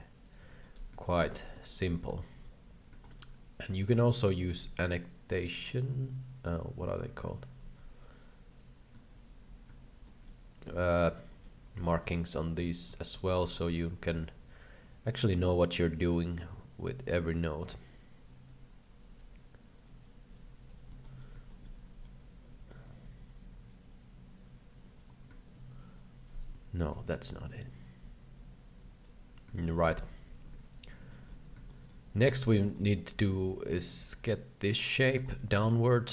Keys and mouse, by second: 0.4 c, 1.1 shift+middle click, 1.3 alt+a, 1.8 shift+middle click, 2.3 shift+middle click, 3.1 shift+middle click, 4.5 n, 5.6 click, 7.6 n, 7.6 t, 10.2 shift+middle click, 10.9 middle click, 11.3 shift+middle click, 11.9 shift+middle click, 13.1 shift+middle click, 13.6 shift+middle click, 15.7-17.7 drag, 18.2 click, 18.8 click, 19.8 click, 20.3 click, 21.0 shift+middle click, 21.6 shift+middle click, 23.7-24.9 drag, 26.6 ctrl+z, 27.3-29.0 drag, 29.7 middle click, 30.1 middle click, 30.5 alt+a, 31.2 shift+middle click, 31.6 shift+middle drag, 32.3 KP_3, 32.7 shift+middle click, 33.3-35.0 drag, 35.2 shift+middle click, 35.5-36.1 middle drag.